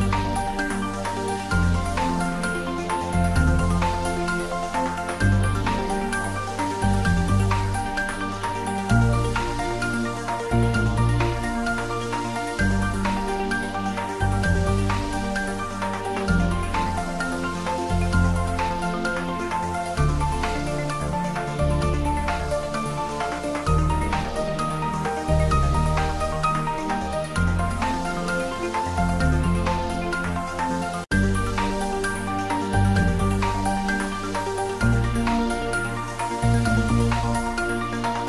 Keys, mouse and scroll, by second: 0.7 click, 3.0 click, 6.3 click, 8.9 click, 9.6 scroll down 1, 10.2-11.4 middle drag, 11.4 scroll up 1, 11.7 middle click, 12.3 click, 14.2 click, 21.4 click, 22.8 click, 23.9 click, 25.8 click, 27.3 click, 27.6-28.3 scroll down 1, 28.3 middle click, 28.7-29.2 scroll up 1, 29.2-30.6 middle drag, 30.6-32.6 drag, 32.6-33.1 scroll down 1, 33.1 middle click, 34.1-38.2 drag.